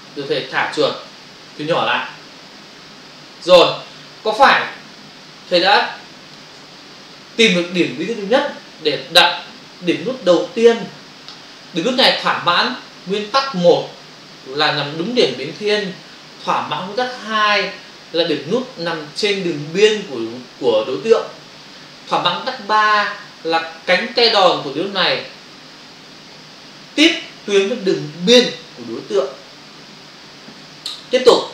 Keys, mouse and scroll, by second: 1.7 ctrl+-, 5.4 space.